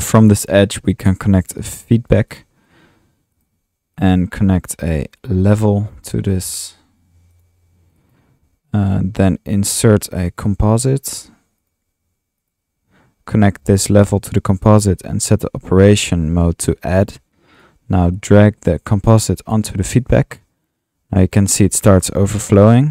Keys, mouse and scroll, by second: 0.0-0.1 typing, 2.1 Tab, 2.3-3.4 typing, 5.5 click, 5.8-7.3 typing, 10.5 typing, 13.3 Tab, 15.0 Tab, 15.9 click, 16.8 click, 20.2-22.6 drag, 22.8-22.9 drag.